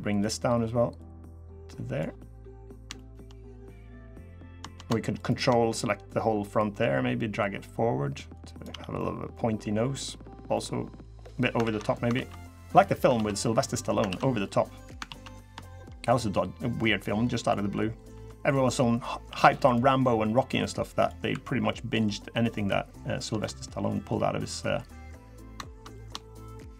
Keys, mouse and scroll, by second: 0.7 click, 1.9 middle click, 2.7 shift+middle click, 3.0 middle click, 3.7 middle click, 3.8 shift+middle click, 4.9 ctrl+click, 5.9-6.2 scroll down 3, 6.2 middle click, 7.1 click, 8.3 click, 8.4 Tab, 8.7 middle click, 10.3 middle click, 11.0 middle click, 11.4 ctrl+z, 11.9 ctrl+z, 12.0 scroll up 1, 12.1 middle click, 12.9 ctrl+z, 13.1 middle click, 13.5 scroll up 2, 13.8 ctrl+z, 14.2 middle click, 14.8 ctrl+z, 15.4 shift+middle click, 16.3 click, 17.9 2, 18.1 click, 19.0 1, 19.4 click, 20.1 click, 21.1 2, 21.4 middle click, 22.3 click, 22.7 middle click, 23.1 shift+middle click, 23.7 middle click, 24.1 scroll down 1, 24.3 middle click, 25.1 click, 25.7 click, 26.4 ctrl+click, 26.6 ctrl+click, 26.6 middle click.